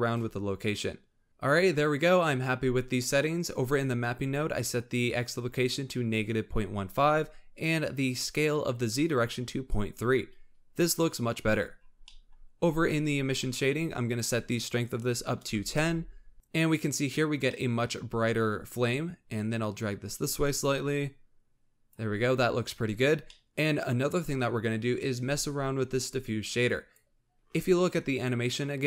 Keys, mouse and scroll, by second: 0.2-1.3 drag, 1.3 scroll up 1, 4.0 click, 11.8-12.2 scroll down 5, 12.2 middle click, 12.9-13.3 scroll up 1, 13.3 middle click, 13.6-14.0 scroll up 1, 14.0-16.3 drag, 17.5-17.9 middle drag, 17.9-19.4 scroll up 1, 19.4-22.9 drag, 22.9-23.3 scroll down 4, 23.3-26.2 middle drag, 26.5 click.